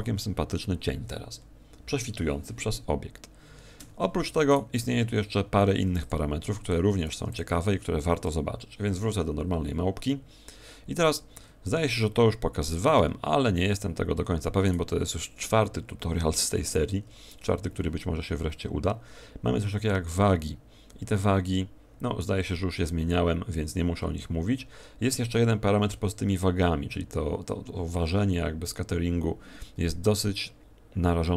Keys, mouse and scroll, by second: 3.7 Escape, 4.4 right click, 5.8 x, 7.0 right click, 7.2 x, 12.9 Escape, 14.6 right click.